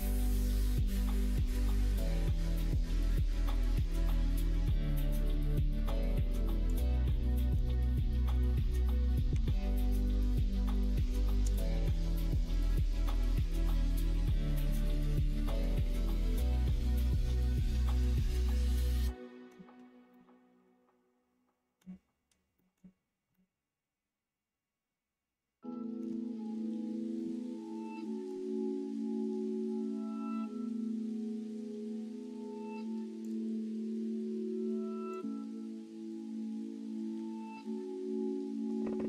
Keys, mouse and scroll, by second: 0.1 middle click, 0.6 click, 6.6-13.5 drag, 14.5 middle click, 15.2-19.4 middle drag, 20.1-21.8 middle drag, 22.5 middle click, 23.2-25.9 middle drag, 27.1-28.2 middle drag, 33.1 click, 35.0 click, 36.0 click.